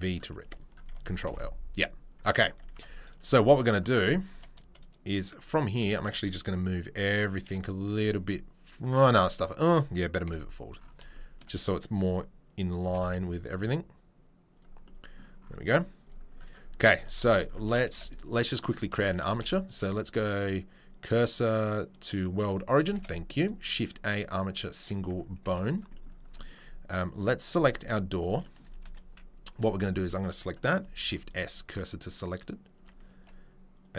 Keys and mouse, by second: 0.4 3, 1.2 ctrl+l, 2.5 Tab, 5.8 a, 10.2 KP_7, 12.8 g, 16.0 click, 16.5-33.9 middle drag, 16.9 Tab, 17.6 Tab, 17.9 shift+a, 19.3 shift+s, 22.9 shift+a, 25.4 z, 27.8 Tab, 28.8 2, 29.7 1, 31.0 shift+s, 32.8 Tab.